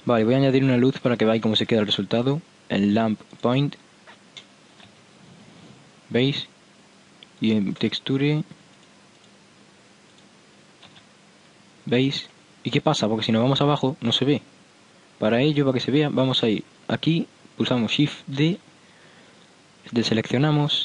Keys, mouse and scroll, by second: 0.6-2.5 drag, 1.5 shift+a, 4.7 click, 4.9 p, 6.1-6.5 middle drag, 6.1 p, 7.4-11.0 drag, 11.0 p, 12.1 p, 12.5-13.2 middle drag, 16.5 right click, 18.5 shift+d, 20.5-20.8 drag.